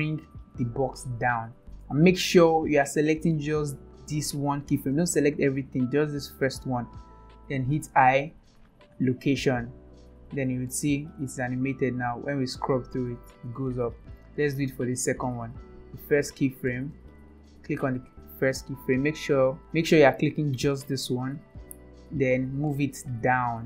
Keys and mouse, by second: 1.7 ctrl+z, 3.2 click, 3.9 click, 4.5 click, 4.9-5.3 drag, 6.4 click, 7.8 i, 10.5-14.1 drag, 14.6 click, 15.8 click, 16.9 click, 17.3 click, 19.1 Left, 20.5 click.